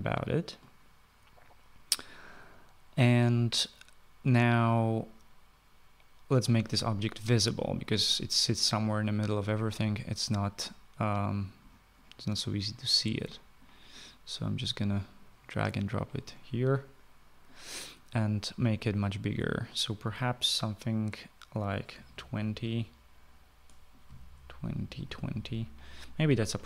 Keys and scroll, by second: 22.0-22.9 typing, 24.1-25.9 typing.